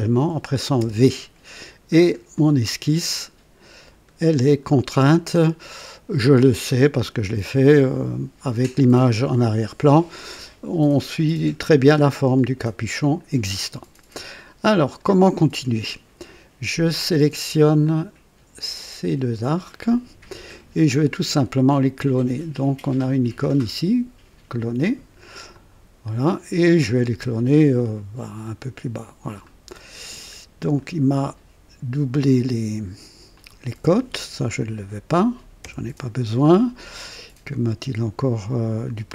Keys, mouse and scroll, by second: 0.8 v, 1.9-2.3 scroll up 2, 2.4 right click, 4.6 scroll up 1, 17.8 click, 19.4 click, 25.5 click, 28.4 click, 29.8-30.2 scroll up 1, 30.8-31.3 right drag, 33.3 click, 35.6 Delete.